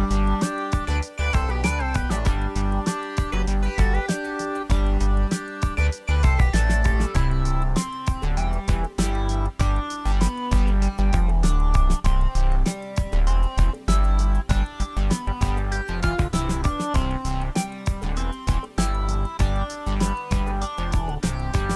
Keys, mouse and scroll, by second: 10.5-11.7 drag.